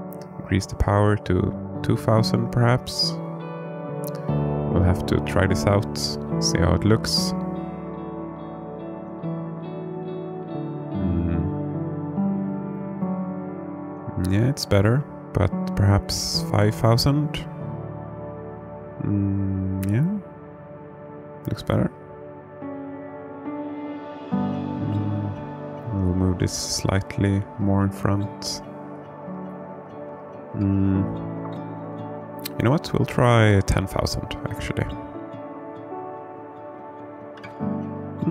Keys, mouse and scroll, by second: 0.8-3.5 drag, 2.4 KP_0, 2.6 KP_0, 3.8-6.1 drag, 7.1 g, 7.6 shift+z, 9.6 click, 11.0 KP_0, 13.3 click, 15.6-19.1 drag, 21.6-23.5 alt+middle drag, 23.9-24.6 scroll down 2, 25.0 alt+shift+middle click, 26.8 g, 27.4 shift+z, 28.8 click, 30.0 KP_0, 34.2-38.1 drag.